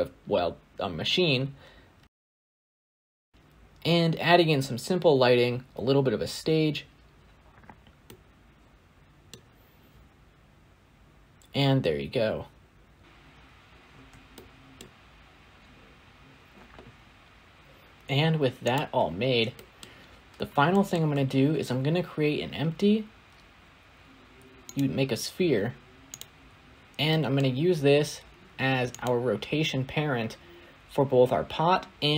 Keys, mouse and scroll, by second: 0.3 shift+click, 0.7 right click, 0.7 middle click, 0.9 click, 1.0 scroll up 1, 1.1 click, 1.2 middle click, 1.4 click, 1.6 scroll up 1, 1.9 middle click, 2.1-3.3 typing, 2.4 middle click, 2.4 scroll up 1, 2.8 shift+middle click, 3.1 click, 3.3 middle click, 3.5 shift+middle click, 5.1 s, 5.2 click, 5.5 click, 5.6 scroll up 3, 5.9 click, 6.0 click, 6.3 middle click, 6.4 click, 6.6 scroll down 1, 6.8-9.2 typing, 6.9 click, 7.0 middle click, 7.3 click, 7.7 click, 8.3 click, 8.5 middle click, 8.9 middle click, 8.9 scroll up 5, 9.0 scroll down 1, 9.3 ctrl+b, 9.4 right click, 9.4 middle click, 9.7 click, 10.4 click, 10.5 click, 10.7 middle click, 10.9 g, 11.0 scroll up 1, 11.0 click, 11.1 scroll down 9, 11.3 middle click, 11.5 scroll up 2, 11.6 click, 11.7 shift+middle click, 11.7 shift+a, 11.8 right click, 11.8 x, 12.0 click, 12.3 shift+click, 12.6 shift+click, 12.8 click, 13.7-14.0 scroll down 6, 14.4-18.3 shift+middle drag, 18.6 click, 19.1 scroll down 3, 19.4-19.8 middle drag, 19.8-20.3 scroll up 4, 20.6-24.6 shift+middle drag, 26.6 scroll down 1, 26.9-28.9 middle drag, 28.9 click.